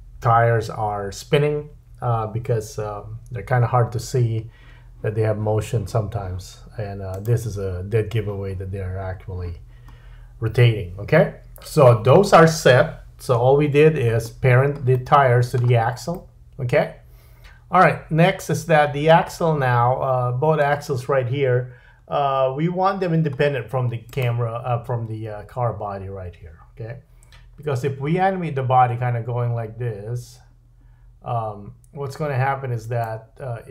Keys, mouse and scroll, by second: 13.4 /, 14.5-14.9 scroll down 2, 14.9 middle click, 16.1 middle click, 21.6-22.5 scroll up 3, 22.5-24.0 scroll down 2, 24.0 click, 28.1 g.